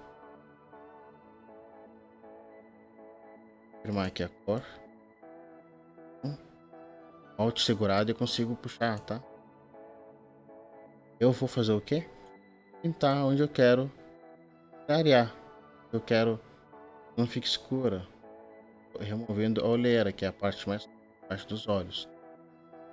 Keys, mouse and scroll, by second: 4.0 alt+click, 6.9 alt+click, 9.4 alt+click, 10.9 alt+click.